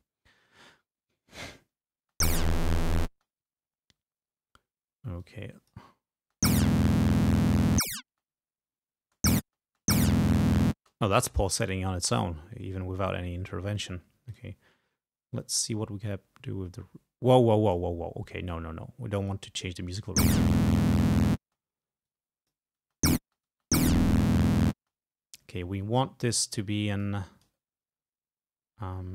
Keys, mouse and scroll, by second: 2.1 space, 3.2 space, 5.3 click, 6.3 space, 8.2 space, 9.1 space, 10.9 space, 14.4 click, 16.1-18.0 drag, 18.6-19.8 drag, 20.0 space, 21.5 space, 22.1 click, 22.9 space, 24.9 space, 27.1 click.